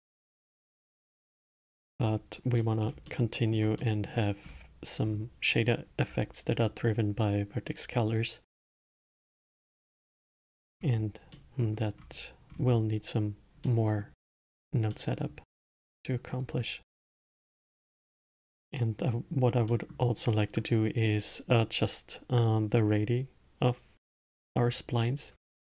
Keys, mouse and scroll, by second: 2.3 scroll down 1, 2.9-4.8 middle drag, 4.8-5.4 scroll up 2, 5.4-7.2 scroll up 2, 7.2-8.4 scroll up 1, 9.1-9.9 scroll down 2, 9.9-11.1 middle drag, 11.1-11.6 scroll down 1, 11.6-12.3 middle drag, 12.3-14.0 scroll up 5, 14.0-14.7 middle drag, 14.7-15.3 scroll down 2, 15.3-23.0 middle drag, 24.5-25.6 middle drag.